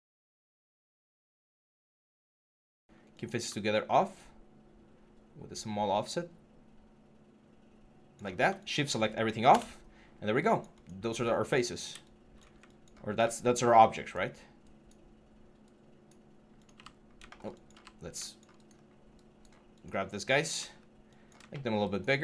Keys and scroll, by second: 9.3 BackSpace, 17.5 f, 18.5 6.